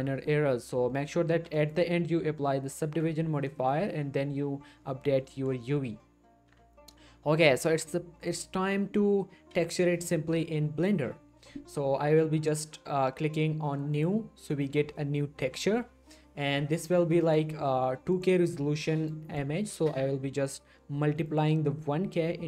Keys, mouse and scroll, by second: 1.3 g, 1.6 right click, 1.8 middle click, 2.9 Tab, 3.6 shift+middle click, 4.1 scroll up 1, 5.6 shift+middle click, 6.5 Tab, 13.9 Tab, 14.1 click, 17.2 click, 20.4 click, 21.3 click.